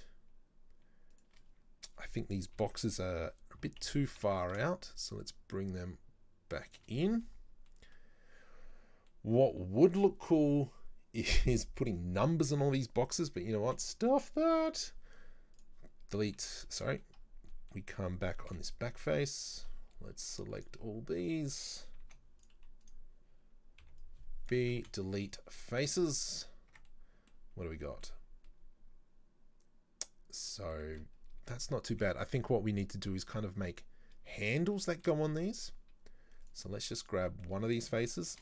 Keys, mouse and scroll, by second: 2.6 ctrl+l, 3.6 g, 7.0 middle click, 7.3-7.7 scroll down 1, 7.7 middle click, 8.4 scroll up 2, 9.1-12.2 middle drag, 13.7 Delete, 15.9-16.4 scroll down 4, 16.4 ctrl+z, 16.8 middle click, 17.2-17.5 scroll up 3, 17.5-18.6 middle drag, 18.6 KP_7, 18.9 z, 20.4 click, 20.6 click, 21.2 right click, 22.1 z, 22.9 right click, 23.9 b, 24.8 Delete, 25.6 middle click, 26.0 z, 26.8 Tab, 26.9 middle click, 27.4-27.8 scroll down 4, 27.8 middle click, 28.2 scroll up 3, 28.5-31.2 middle drag, 31.2-31.5 scroll up 4, 31.5-32.1 shift+middle drag, 32.1 Tab, 34.8 shift+middle click, 35.1-36.5 shift+scroll down 1, 36.5 click, 37.1 right click, 37.3 middle click, 38.3 shift+d.